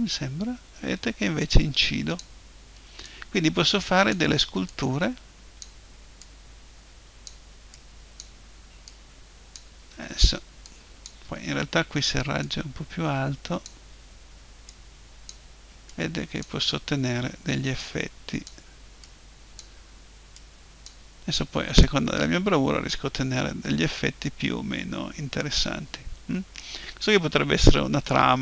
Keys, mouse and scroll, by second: 0.1-2.1 drag, 3.0-14.4 drag, 14.7-23.3 drag, 23.3-25.0 middle drag, 27.0-28.4 middle drag.